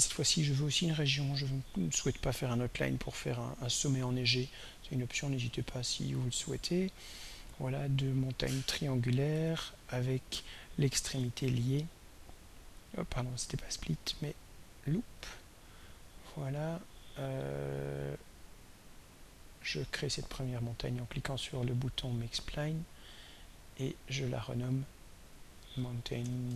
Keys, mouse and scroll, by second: 5.4 click, 6.4 click, 7.9 click, 9.4 right click, 12.0 click, 14.2 right click, 15.2 click, 22.1 click, 23.8 click, 24.7 click, 25.4 click, 26.3 shift+End.